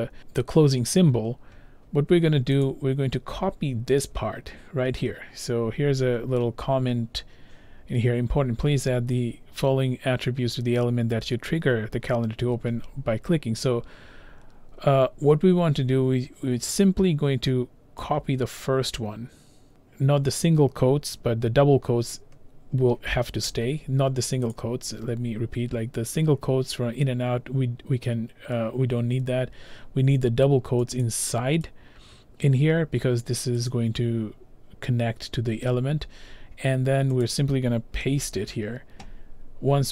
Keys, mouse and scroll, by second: 2.7 click, 3.4 scroll, 3.5-4.4 scroll down 2, 4.5-5.6 scroll down 2, 5.6-9.4 scroll down 1, 9.4 scroll down 1, 9.6 scroll, 19.7 click, 20.4 click, 23.5 ctrl+c, 24.5 click, 31.0 click, 32.5 click, 33.7 click, 37.3 click, 38.1 ctrl+v.